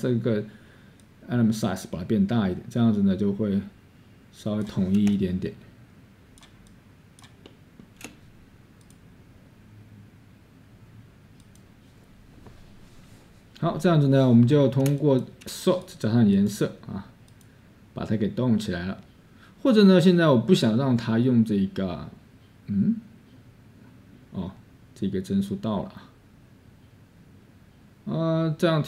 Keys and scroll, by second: 6.0-8.1 scroll, 12.3-13.1 scroll.